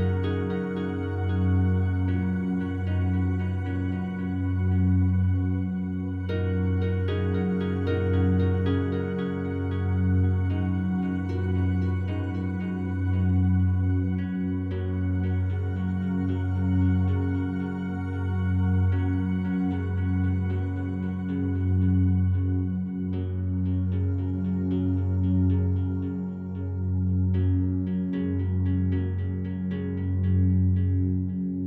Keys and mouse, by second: 0.1 click, 4.4 click, 5.2 click, 6.1 click, 6.2 click, 7.8-8.9 typing, 9.6 Return, 12.1 click, 14.5 click, 18.3 click, 19.0 click, 21.5-22.5 alt+drag, 22.7-24.1 ctrl+alt+drag, 25.1 click, 25.6 click, 27.7 0, 29.0 ctrl+alt+click.